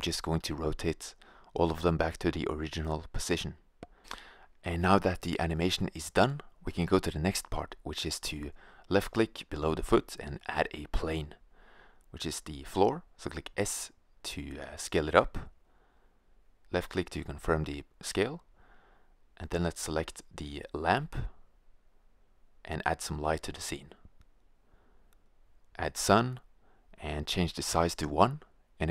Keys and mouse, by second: 0.0-0.4 drag, 0.4 r, 1.4-2.1 drag, 2.6 i, 3.0 right click, 3.3 r, 4.5 i, 8.9 shift+a, 12.8 g, 14.1-14.6 drag, 14.6 s, 17.8-20.7 middle drag, 20.0 s, 20.7-22.6 drag, 24.1-25.9 right drag, 25.4-28.9 drag.